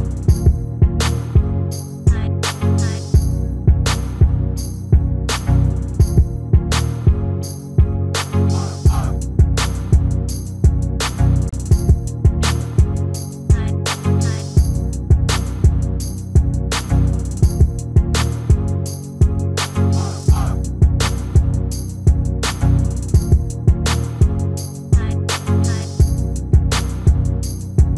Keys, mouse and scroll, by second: 1.7 Tab, 3.3 shift+d, 7.1 x, 9.6 shift+a, 15.2-16.9 drag, 17.0 click, 17.0-19.0 middle drag, 18.6 s, 20.1-22.1 middle drag, 22.2-24.1 middle drag, 23.2-25.1 drag, 25.1 KP_3, 26.6-27.9 middle drag.